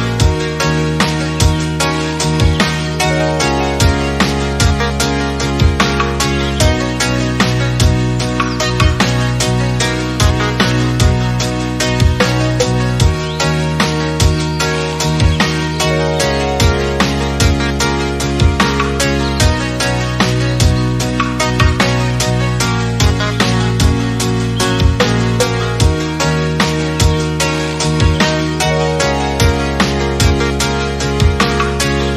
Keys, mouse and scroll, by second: 0.6 click, 1.0 click, 1.8 click, 2.2 click, 2.9 click, 3.3 click, 4.4 alt+z, 4.7 Tab, 5.0 click, 5.2 scroll down 4, 5.4-6.4 middle drag, 6.4-7.0 scroll down 3, 6.6 click, 7.0-7.4 middle drag, 7.4-8.1 scroll down 4, 8.1-10.0 middle drag, 10.0-11.6 drag, 13.4-13.9 middle drag, 13.9 click, 14.4-18.4 scroll up 1, 20.7 click, 20.9 scroll up 2, 21.2 click, 22.1-22.5 shift+middle drag, 22.5-22.9 scroll up 1, 22.9 middle click, 23.1-23.8 scroll up 3, 23.8 KP_1, 24.4 Tab, 24.8 a, 25.5-25.9 scroll up 3, 25.9 a, 26.6 alt+s, 28.7 Tab, 28.9 click, 29.1 Tab, 29.5 a, 29.8 a, 30.6 alt+s.